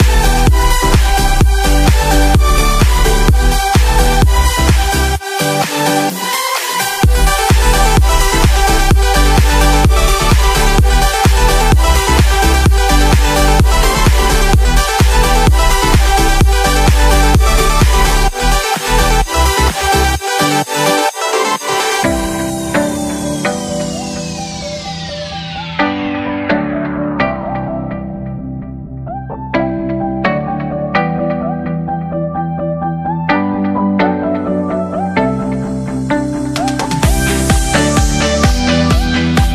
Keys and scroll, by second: 2.1 space, 4.3 space, 6.7 ctrl+-, 7.1 space, 7.4 ctrl+=, 11.3 space, 11.8 ctrl+=, 19.2 space, 22.2 space, 28.0 ctrl+-, 29.2 ctrl+=, 30.3 ctrl+=, 34.2 space, 36.6 space, 38.9 space.